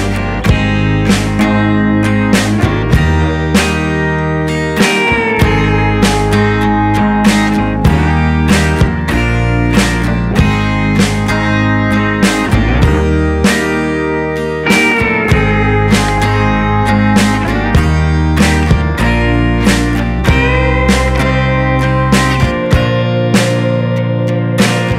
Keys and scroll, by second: 11.5 ctrl+=, 12.0 space, 15.1 ctrl+0.